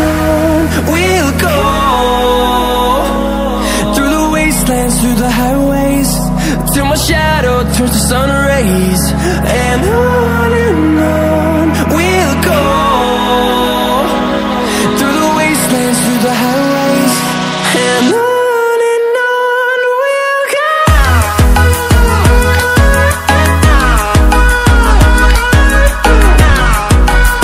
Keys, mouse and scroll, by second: 6.2 ctrl+alt+scroll down 1, 6.9 ctrl+alt+scroll up 1, 7.5-9.5 drag, 9.5 ctrl+alt+scroll up 1, 10.7 alt+shift+click, 12.0 ctrl+alt+scroll up 1, 13.0 click, 14.0-14.4 ctrl+alt+scroll down 1, 15.6 click, 16.2 ctrl+alt+scroll up 3, 16.7 ctrl+click, 17.7 alt+shift+click, 18.9 ctrl+alt+scroll down 1, 19.3-27.4 drag, 20.6-21.2 drag.